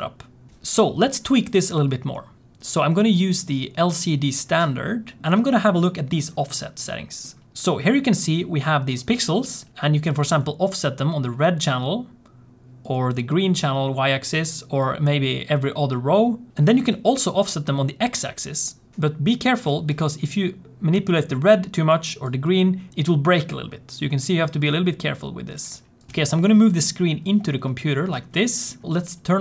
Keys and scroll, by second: 26.1 g.